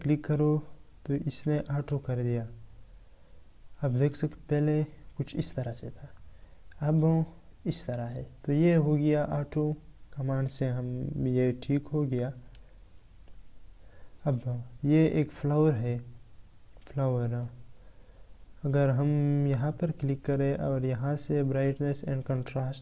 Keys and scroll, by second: 11.3 ctrl+Caps_Lock, 12.8 ctrl+Tab.